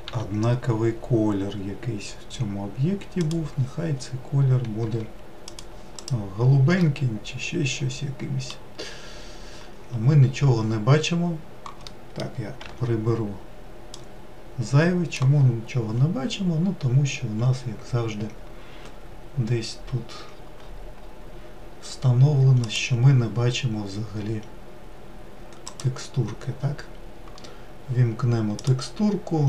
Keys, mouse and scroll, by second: 13.8-29.4 drag.